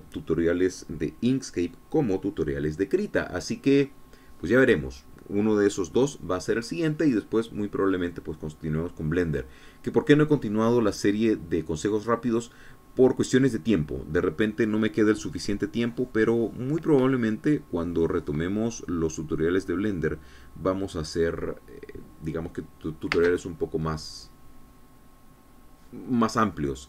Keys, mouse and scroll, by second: 24.1 space.